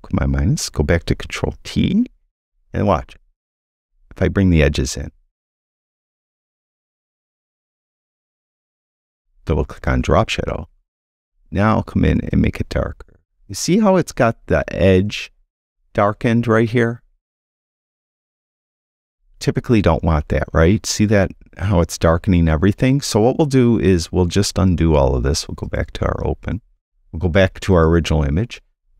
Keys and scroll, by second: 1.5 super+t.